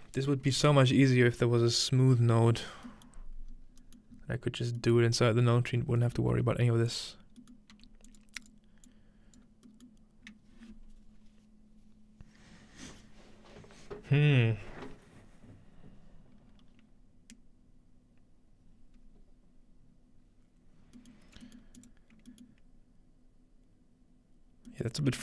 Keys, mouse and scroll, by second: 3.1-3.5 middle drag, 3.5-5.7 scroll up 1, 5.2-10.3 drag, 6.3 typing, 7.7 typing, 20.8-22.5 scroll down 2, 21.2 middle click, 21.6-22.3 middle drag, 21.8-23.7 drag, 22.5-24.1 middle drag, 24.9-25.2 ctrl+middle drag.